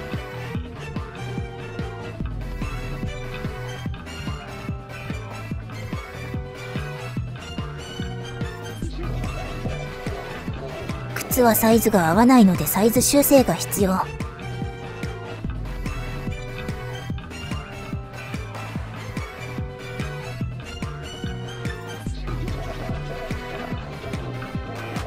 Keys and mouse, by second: 0.3 click, 0.3-1.4 middle drag, 1.4 click, 1.6 middle click, 3.6 shift+s, 4.1-5.4 drag, 5.6 click, 6.5 click, 6.8 shift+click, 7.6 click, 8.4 click, 11.3 shift+s, 11.7 click, 12.5-13.8 drag, 14.2 middle click, 14.9 click, 15.8 click, 16.2 middle click, 17.5 middle click, 18.3 middle click, 18.7 click, 18.8 click, 19.4 middle click, 19.9-21.0 middle drag, 21.3 middle click, 22.7 click, 22.9 ctrl+z, 23.9 click, 24.0-25.0 drag.